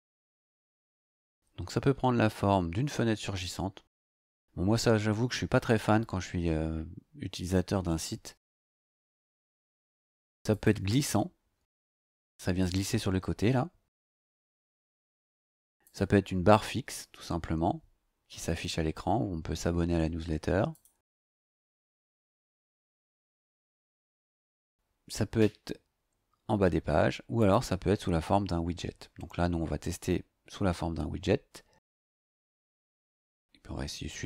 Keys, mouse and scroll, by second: 5.2 scroll down 2, 7.4 scroll down 2, 10.5 click, 15.8 click, 20.7 click, 27.4 click.